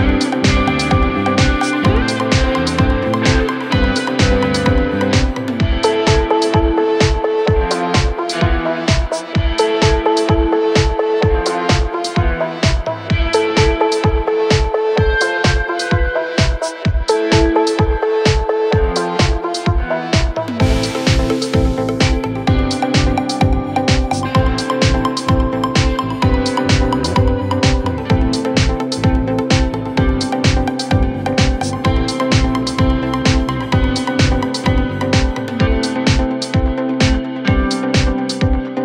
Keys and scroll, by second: 4.7 Left.